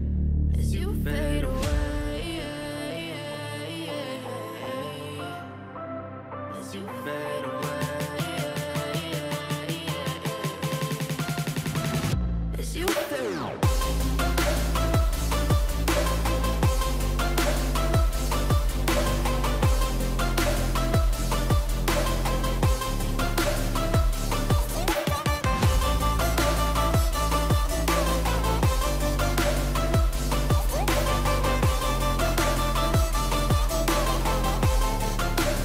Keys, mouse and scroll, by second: 1.5 ctrl+t, 15.7 right click, 23.6 ctrl+t, 32.5 double click, 35.4 double click.